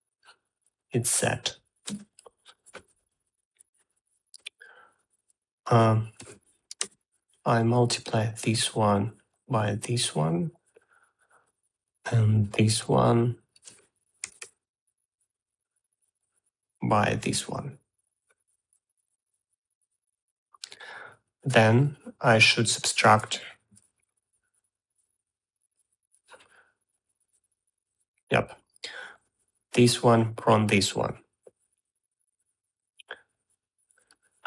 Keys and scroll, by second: 3.0 shift+z, 6.7 Tab, 6.9-7.8 typing, 14.7 Tab, 14.8 m, 24.0-25.2 typing.